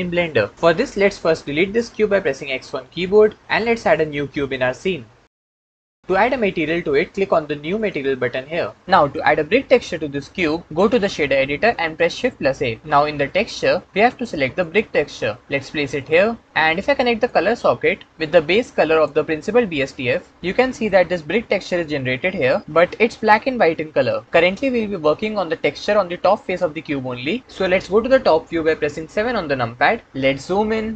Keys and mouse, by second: 2.4 x, 4.0 shift+a, 7.7 click, 9.0 middle click, 11.9 shift+a, 17.2 click, 18.1-18.9 drag, 20.7-22.3 middle drag, 29.1 KP_7.